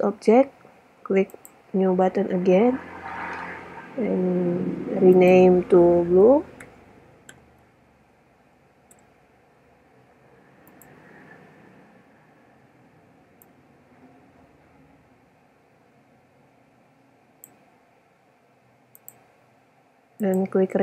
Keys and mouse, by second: 1.4-2.3 drag, 5.3-7.2 drag, 8.8-9.8 middle drag, 10.9-12.4 drag, 12.4-13.6 middle drag, 19.1-20.5 drag.